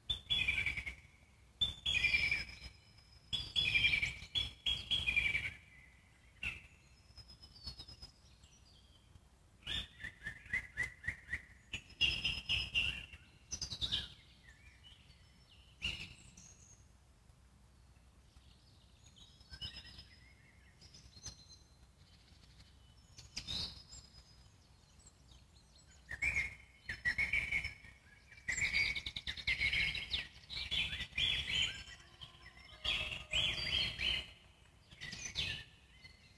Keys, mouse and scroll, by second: 0.5-2.7 alt+middle drag, 2.7-3.8 drag, 3.8-5.9 alt+middle drag, 5.9 click, 6.8 alt+middle click, 7.5-21.2 drag, 21.2-22.9 alt+middle drag, 22.9 scroll down 1, 23.2-24.9 alt+middle drag, 24.9-25.3 scroll up 2, 25.3 middle click, 26.3-36.3 drag.